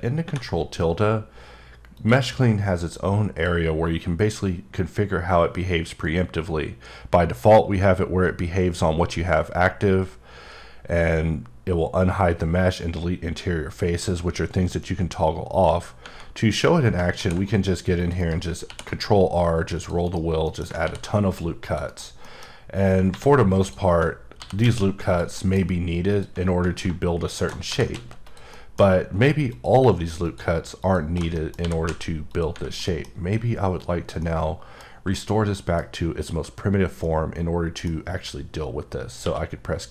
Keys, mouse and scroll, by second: 2.0 click, 15.5 click, 17.2 r, 17.4 scroll up 1, 18.0 click, 18.2 right click, 18.6 ctrl+r, 18.9 scroll up 1, 19.6 scroll up 7, 19.8 click, 20.0 right click, 20.4 middle click, 20.6-21.4 scroll up 2, 20.8 r, 21.6 click, 21.9 right click, 22.2 middle click, 22.7-23.1 scroll up 1, 23.1 3, 23.6 alt+click, 24.2 scroll down 1, 24.4 g, 24.6 z, 25.1 click, 25.3 middle click, 26.1 alt+click, 27.7 g, 27.9 z, 28.2 click, 28.5 middle click, 29.5 alt+click, 30.8 alt+shift+double click, 31.3 middle click, 31.6 g, 31.9 z, 32.8 middle click, 35.1 middle click, 36.0 scroll up 1, 37.4-37.9 middle drag, 39.2 q.